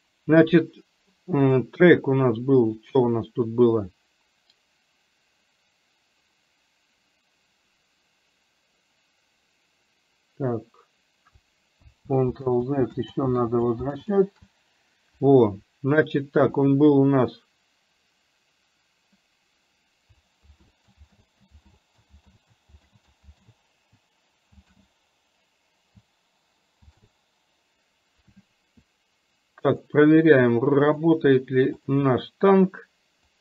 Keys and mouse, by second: 1.4 click, 12.4 ctrl+z, 13.5 ctrl+z, 14.0 ctrl+z, 20.5 ctrl+z, 22.9 ctrl+z, 29.8 click, 30.9 click, 31.9 click.